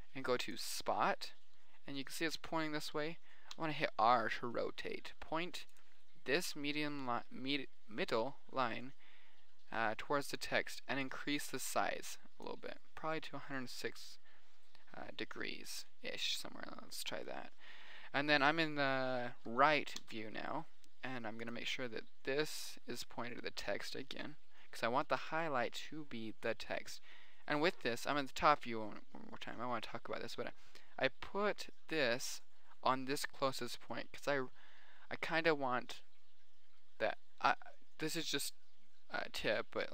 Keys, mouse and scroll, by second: 1.1-1.8 middle drag, 2.3 middle click, 2.5-2.9 drag, 2.9-4.0 middle drag, 4.0 r, 4.7 middle click, 5.3 middle click, 5.9 middle click, 6.5-7.1 middle drag, 7.7-11.5 middle drag, 11.5-13.2 drag, 14.0 middle click, 14.3 middle click, 14.9 middle click, 15.5 middle click, 16.1 middle click, 16.8 KP_3, 17.3 middle click, 17.9 middle click, 18.5 middle click, 19.1-19.9 middle drag, 20.4 r, 20.9 middle click, 21.5 middle click, 22.1-23.2 middle drag, 23.3-23.7 middle drag, 23.9 middle click, 25.1 middle click, 25.6 KP_7, 25.7 middle click, 37.7-39.9 middle drag.